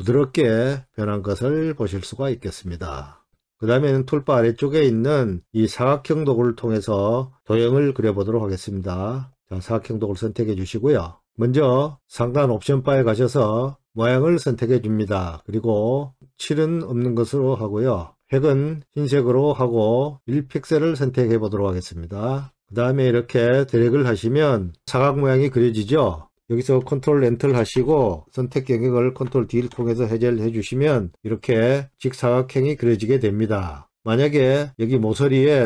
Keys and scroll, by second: 26.5 ctrl+Return, 29.5 ctrl+d.